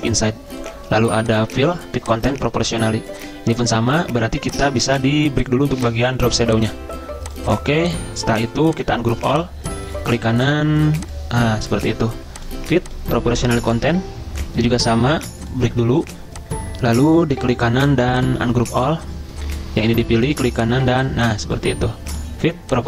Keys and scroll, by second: 17.3 ctrl+z.